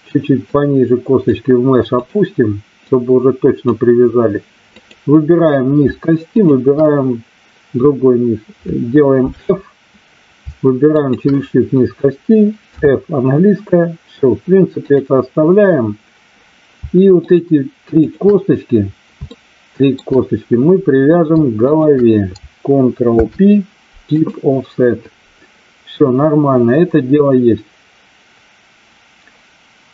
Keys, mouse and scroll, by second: 0.5 click, 2.0 click, 2.9 click, 4.6 click, 6.4 shift+click, 10.9 shift+click, 14.8 click, 17.2 shift+click, 18.0 shift+click, 19.2 shift+middle click, 21.6 shift+click, 23.1 ctrl+p.